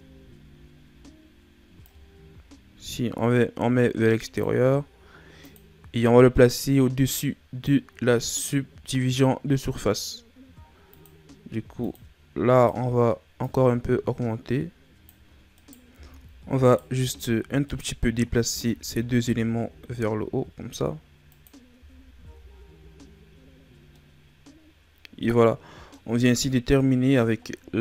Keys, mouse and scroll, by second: 0.1-0.5 ctrl+scroll up 2, 1.8 click, 5.4 click, 10.9-15.4 drag, 15.4 scroll up 1, 15.5 right click, 15.8 Tab, 16.6 right click, 17.6 shift+right click, 18.4 s, 21.7 Tab, 22.1 a, 23.3-23.9 scroll down 4, 23.9-27.2 middle drag, 27.2 scroll up 3.